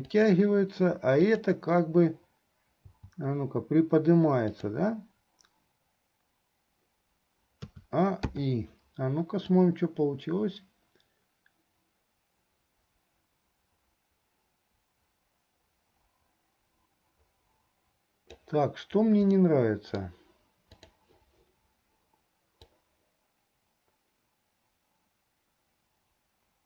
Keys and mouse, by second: 1.4 click, 7.8 a, 8.6 i, 9.7-18.6 drag, 19.6 middle click, 21.0 click, 22.9-26.6 drag.